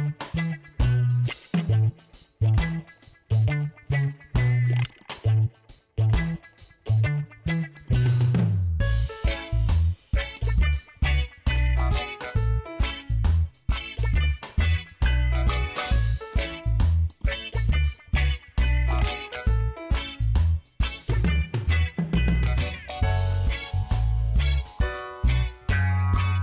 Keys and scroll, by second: 1.2 ctrl+i, 17.9 ctrl+g, 19.2 ctrl+j, 20.6 ctrl+e.